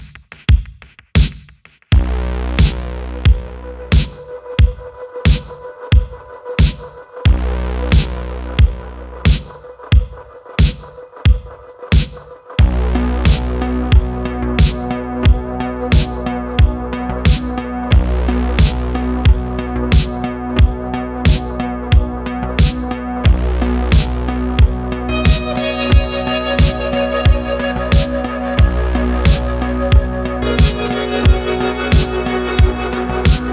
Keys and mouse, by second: 0.7 e, 0.9 x, 1.8 middle click, 2.3 click, 5.5 alt+p, 7.6 alt+p, 9.6 click, 10.6 alt+p, 12.5 alt+p, 15.1 shift+click, 15.5 middle click, 16.0-16.7 drag, 16.9 middle click, 17.2 shift+middle click, 17.5 click, 19.5 click, 20.3-30.5 drag, 22.0 BackSpace, 22.2 BackSpace, 22.2 BackSpace, 25.2 BackSpace, 25.3 BackSpace, 31.8 click, 33.1 click.